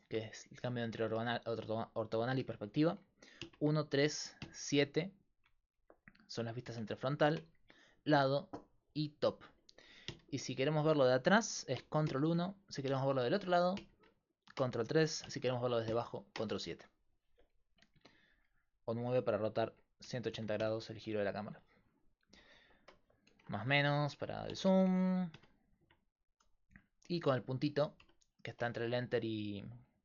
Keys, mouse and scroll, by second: 0.6 KP_5, 1.6 KP_5, 2.2 KP_5, 3.4 KP_1, 3.7 KP_3, 4.4 KP_7, 6.7 KP_1, 7.4 KP_3, 8.2 KP_7, 10.1 KP_1, 12.0 ctrl+Pause, 12.1 ctrl+KP_1, 12.2 ctrl+Pause, 13.8 ctrl+Pause, 13.8 ctrl+KP_3, 15.8 ctrl+Pause, 15.9 ctrl+KP_7, 18.0 KP_9, 19.0 KP_9, 19.7 KP_9, 20.3 KP_9, 23.3 KP_Add, 23.6 KP_Subtract, 23.8 KP_Add, 23.9 KP_Subtract, 24.1 KP_Subtract, 24.5 KP_Add, 24.6 KP_Add, 24.6 KP_Subtract, 24.9 KP_Subtract, 25.3 KP_Multiply, 26.5 KP_Divide, 26.7 KP_Decimal, 28.1-29.4 right drag.